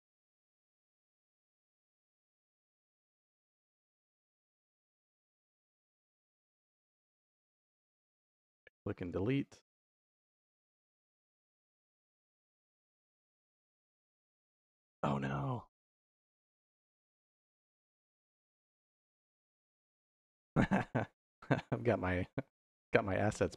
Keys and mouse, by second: 2.1 click, 3.0 click, 7.1 Delete, 7.6-9.0 right drag, 10.8 click, 12.1 y, 18.2 middle click, 19.2 middle click, 22.1 middle click, 23.1 middle click.